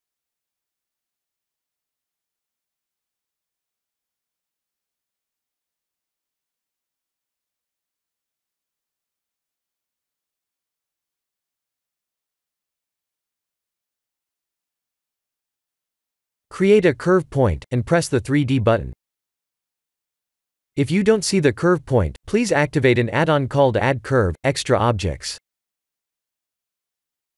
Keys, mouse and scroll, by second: 0.5 right click, 1.5 Tab, 2.2 ctrl+r, 3.9 ctrl+r, 6.7 ctrl+r, 8.2 ctrl+r, 12.2 ctrl+r, 13.4 Tab, 14.3 click, 15.1-16.4 scroll down 5, 16.4 scroll down 3, 18.4 shift+a, 22.5 g, 23.9 ctrl+z, 24.5 Tab, 24.9 g.